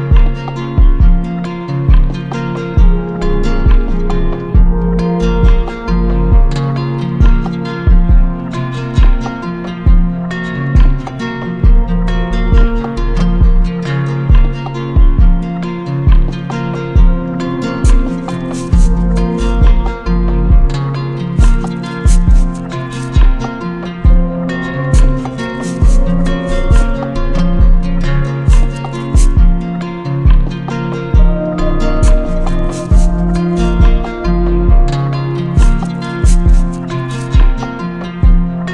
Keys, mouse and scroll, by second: 0.2 click, 0.3 ctrl+z, 2.9 click, 3.3 ctrl+z, 9.6 shift+click, 12.9 shift+click, 14.8 shift+click, 16.7 shift+click, 18.0 alt+click, 19.2 right click, 20.0 click, 21.0 right click, 22.2 right click, 26.4 shift+click, 29.1 shift+click, 33.8 shift+click, 34.5-35.8 shift+drag, 36.2-37.3 drag.